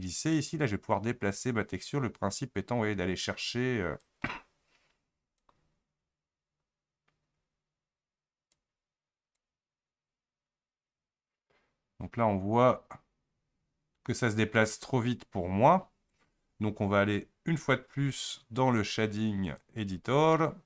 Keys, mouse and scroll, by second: 0.3-12.4 shift+drag, 18.8 click, 20.3-20.6 middle drag.